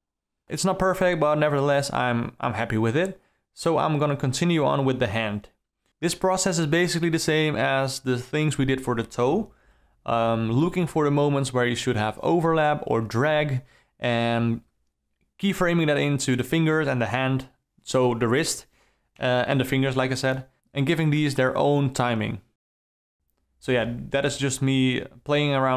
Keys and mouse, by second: 0.6-3.5 typing, 0.7 ctrl+middle click, 1.5 click, 1.9 ctrl+click, 3.6 click, 4.6-8.1 typing, 4.9 alt+a, 4.9 click, 5.7 shift+Left, 5.8 Up, 6.3 shift+Left, 8.3 ctrl+alt+middle click, 8.5 alt+middle click, 8.7 alt+space, 8.7 alt+middle click, 9.2 alt+space, 9.2 alt+middle click, 9.6 alt+middle drag, 9.8 alt+a, 9.8 click, 10.1 click, 10.4-17.7 typing, 10.6 alt+a, 11.0 click, 11.5 click, 11.8 alt+middle click, 12.7 shift+Left, 13.8 click, 14.7 shift+Left, 15.2 Left, 15.4 alt+r, 15.9 shift+Left, 17.7 shift+Left, 19.0 space, 19.3 Down, 19.4 Left, 19.6 Left, 19.6 Right, 19.8 Down, 20.9 r, 21.1 r, 21.5 i, 21.6 Right, 21.6 Right, 21.7 Right, 21.8 Right, 22.1 Right, 22.2 Right, 22.2 Down, 22.3 Down, 22.4 ctrl+z, 22.6 ctrl+z, 22.6 Left, 22.7 Right, 22.8 Right, 23.4 click, 23.5 Up, 23.7-25.7 typing, 24.2 alt+click, 24.7 alt+click, 25.0 alt+click, 25.3 alt+click, 25.5 alt+middle click.